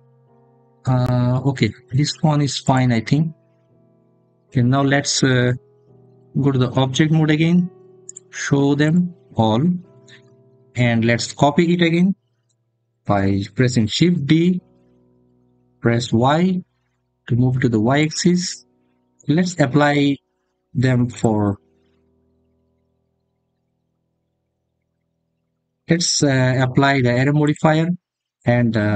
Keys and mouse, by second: 2.4 click, 6.2 Tab, 7.9 click, 8.6 click, 14.4 shift+d, 15.9 y, 17.8 click, 21.0-28.9 drag.